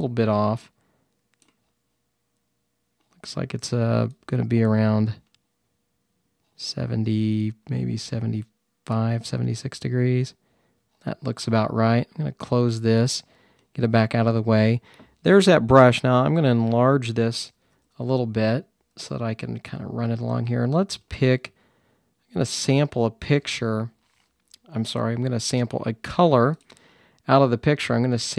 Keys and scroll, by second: 17.1-17.9 typing, 19.0-20.2 typing.